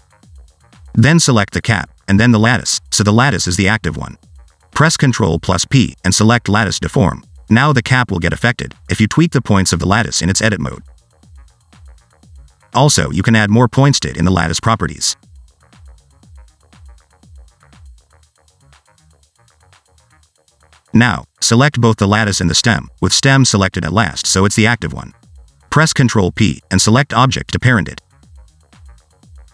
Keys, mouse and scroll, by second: 1.1 click, 2.4 shift+click, 3.9 ctrl+p, 9.4 click, 10.2 Tab, 10.7 click, 10.9 click, 11.3 click, 12.0 click, 12.2 click, 13.5 click, 14.5 click, 15.8 click, 17.8 click, 18.2 click, 19.2 click, 19.3 click, 19.8 click, 19.9 click, 20.2 click, 20.3 click, 20.6 click, 20.8 click, 21.3 Tab, 22.2 s, 22.7 click, 23.6-24.1 scroll down 1, 24.9 click, 25.5 shift+click, 26.3 ctrl+p, 28.5 click, 29.0 g.